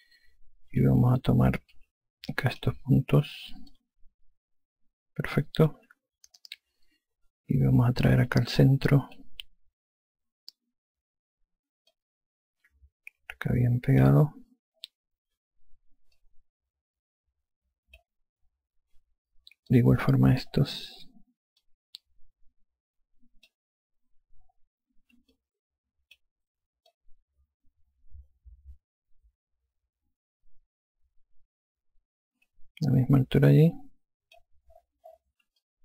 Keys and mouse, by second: 2.6 5, 3.2 click, 4.6 alt+click, 9.1 alt+click, 12.8 click, 17.0 click, 20.6 click, 22.5 click, 26.2 alt+click, 27.8 click.